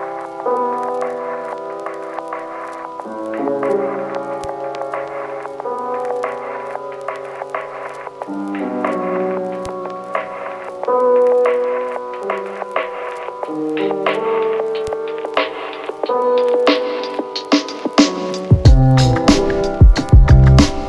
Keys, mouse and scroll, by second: 1.8-8.7 click, 9.9 click, 13.9 click, 16.1-20.4 click.